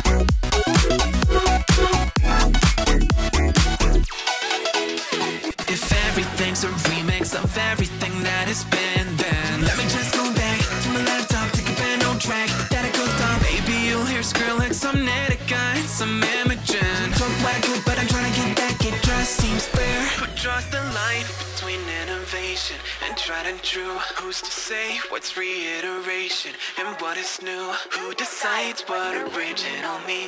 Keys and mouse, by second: 0.7 click, 1.3 click, 2.7 click, 3.4 click, 4.2 click, 4.9 click, 6.0 click, 6.8 click, 8.2 ctrl+r, 9.6 click, 10.8 click, 11.4 click, 13.0 click, 13.7 click, 16.4 click, 16.9 click, 18.2 ctrl+r, 20.2 click, 21.3 click, 21.8 click, 22.5 click, 25.0 click, 25.4 click, 26.4 click, 26.7 click, 27.5 click, 28.0 click.